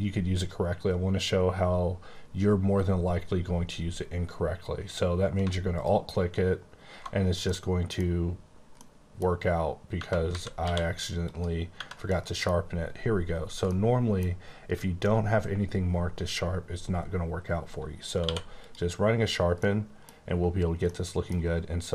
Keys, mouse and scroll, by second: 5.4 alt+Num_Lock, 5.7 alt+click, 7.4 middle click, 8.7 middle click, 9.9 Tab, 10.2-10.5 typing, 11.7 Tab, 12.1 middle click, 12.6-13.6 scroll up 2, 13.6 middle click, 18.2 middle click, 18.2 q, 18.5 click, 19.2 !, 19.5 middle click, 20.9 middle click.